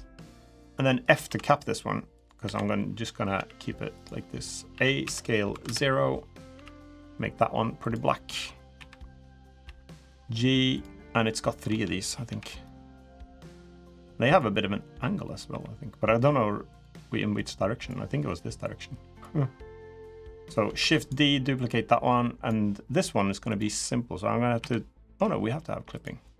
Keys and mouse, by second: 0.3 middle click, 1.0 f, 1.9 click, 2.2 l, 3.1 g, 4.5 a, 4.8 s, 6.3 g, 7.9 g, 8.5 KP_1, 10.8 middle click, 10.8 g, 12.0 KP_3, 13.2 click, 15.2 r, 17.1 click, 18.4 click, 20.5 shift+d, 21.3 click, 23.2 click, 24.3 KP_1, 25.7 click.